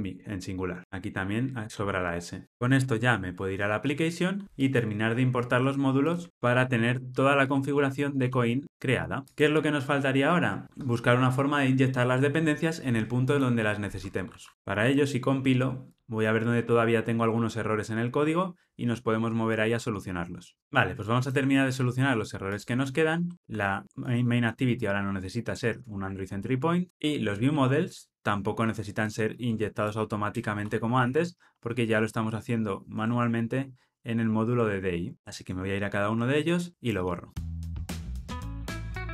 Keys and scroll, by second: 0.8 super+z, 6.3 alt+Return, 8.6 ctrl+alt+o, 14.8 super+F9, 23.3 super+BackSpace, 30.9 ctrl+alt+o, 38.2 ctrl+alt+o.